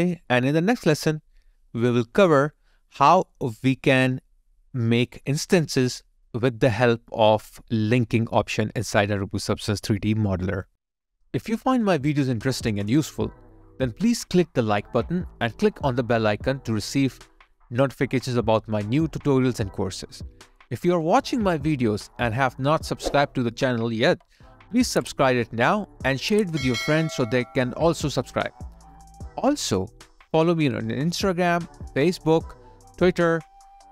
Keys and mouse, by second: 11.5 alt+click, 13.0 alt+right click, 14.5 alt+click, 19.2 alt+click, 22.2 alt+click, 28.9 double click, 29.1 Delete, 30.3 alt+right click, 30.9 alt+click, 31.8 alt+right click, 32.4 alt+middle click.